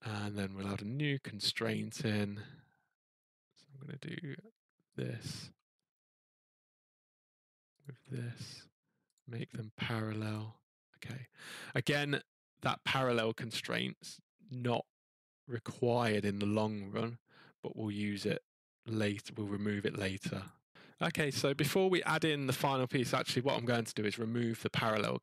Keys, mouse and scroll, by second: 1.7 click, 1.9-2.8 scroll, 3.6 middle click, 3.7 middle click, 4.0 scroll, 4.9 click, 5.4 middle click, 5.4 scroll, 6.7 scroll, 7.8 click, 9.1 click, 10.3 click, 12.9 scroll, 20.4 click, 20.7 click.